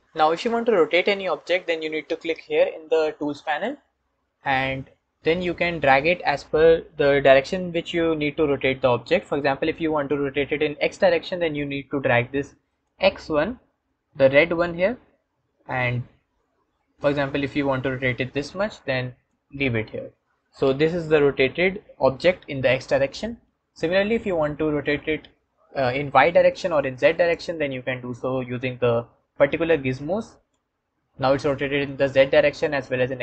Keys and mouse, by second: 3.3 click, 12.7 click, 27.3 click.